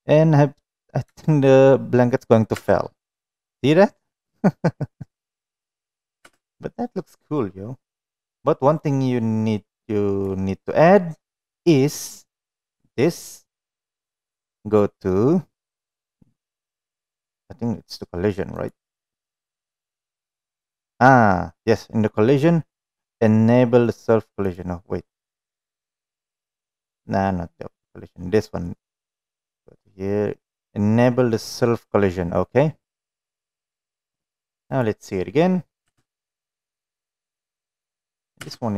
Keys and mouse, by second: 0.3-0.6 middle drag, 1.3 shift+middle click, 1.7-2.4 middle drag, 2.8 space, 6.6 space, 9.1-10.6 drag, 18.9 click, 24.8 click, 34.2 click, 36.3 space.